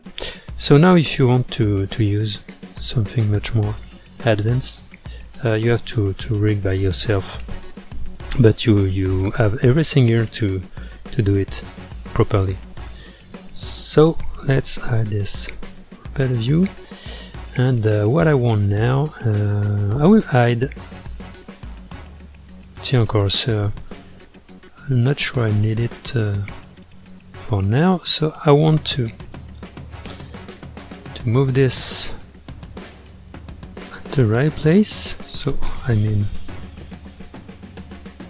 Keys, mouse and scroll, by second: 0.0-2.7 drag, 6.0 click, 12.0 click, 13.5 click, 15.0 h, 15.6-16.5 middle drag, 16.5-17.5 scroll up 7, 17.5-20.5 middle drag, 20.6 click, 23.0 click, 23.8-26.8 middle drag, 27.4-28.2 scroll up 2, 28.2 click, 28.7-31.0 middle drag, 31.0 shift+click, 31.6-32.5 middle drag, 32.5-33.0 scroll up 2, 34.6 click, 36.4 ctrl+z, 37.8-38.2 drag.